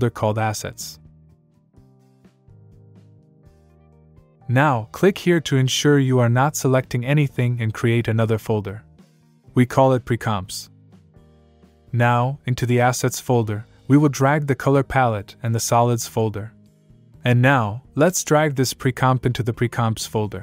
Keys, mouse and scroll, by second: 0.1 click, 1.2-3.9 typing, 5.1 click, 7.9-10.7 typing, 11.6 Return, 13.1 click, 15.3 click, 18.2 click.